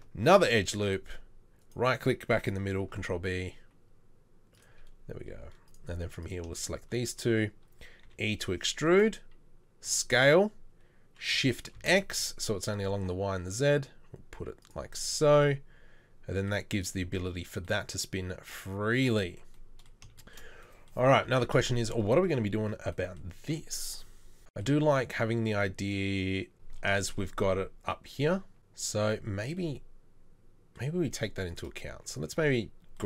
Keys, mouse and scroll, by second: 0.4 ctrl+r, 2.9 ctrl+b, 8.1 e, 10.0 s, 15.3 Tab, 32.0 Tab, 32.3 Tab, 32.6 Tab.